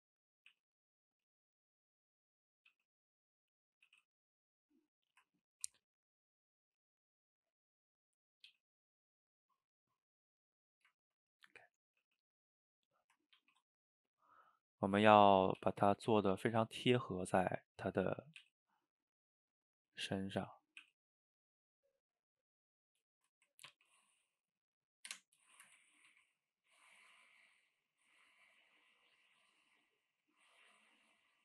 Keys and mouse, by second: 0.0-0.5 middle drag, 0.5 e, 2.0 click, 2.2-2.7 middle drag, 2.7 g, 3.4-3.9 middle drag, 3.9 g, 5.1-5.5 middle drag, 5.5 ctrl+t, 7.6 middle click, 8.5 g, 9.4-12.0 middle drag, 12.0 g, 12.7-13.4 middle drag, 13.4 ctrl+t, 15.2 middle click, 15.6 g, 16.8-18.2 middle drag, 18.2 click, 18.4 e, 19.5-20.9 middle drag, 20.9 e, 23.2 shift+drag, 23.7 ctrl+t, 25.6 shift+click, 26.1 ctrl+t, 28.3-29.2 middle drag, 29.2 click, 29.4 shift+click, 29.6-30.4 middle drag, 30.4 g, 31.0-31.4 middle drag.